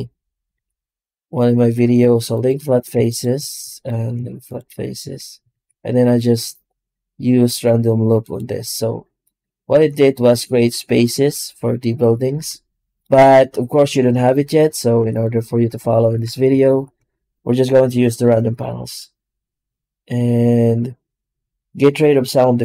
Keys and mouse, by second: 0.4 q, 3.6 shift+right click, 4.0 q, 4.9 Tab, 5.4 shift+q, 13.3 ctrl+z, 13.5 ctrl+z, 14.5 right click, 14.9 x, 15.3 right click, 15.5 Tab, 16.0 Tab, 16.6 shift+q.